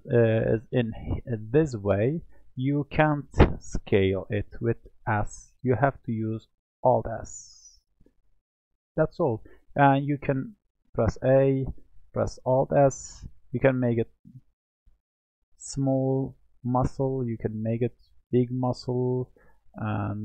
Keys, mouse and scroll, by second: 6.0 alt+s, 8.8 alt+s, 8.9 alt+s, 9.7 alt+s, 10.7 a, 12.4-14.4 alt+s, 15.1 alt+s, 15.1-18.1 middle drag, 18.4 click, 18.9 click, 20.0 click.